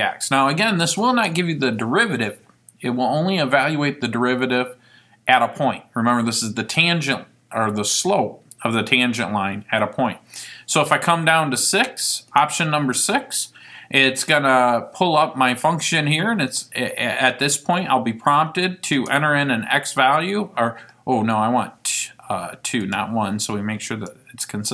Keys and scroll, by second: 12.5 6, 19.1 1, 23.5 Left, 24.1 2.